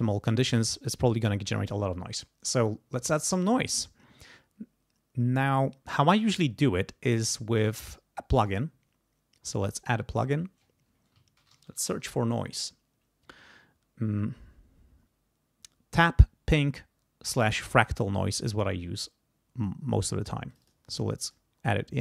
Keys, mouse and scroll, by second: 8.4 right click, 9.8 click, 11.1-12.4 typing, 17.3 click, 20.5 click, 21.2 click.